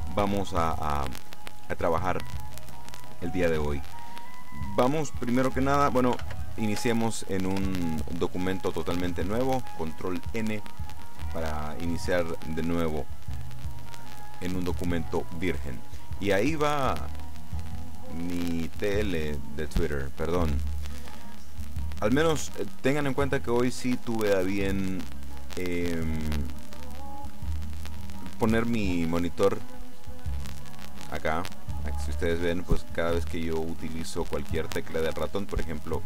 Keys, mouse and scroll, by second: 6.2 ctrl+n, 7.6 Return, 35.6-36.0 middle drag.